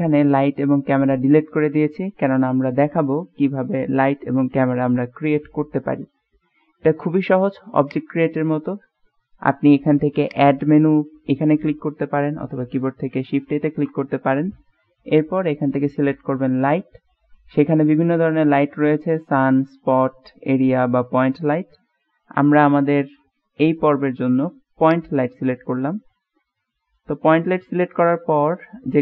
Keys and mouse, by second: 7.9 click, 10.3 click, 13.7 shift+a, 27.4-27.8 middle drag, 27.8-28.4 drag, 27.8-28.4 right drag, 28.4-29.0 middle drag.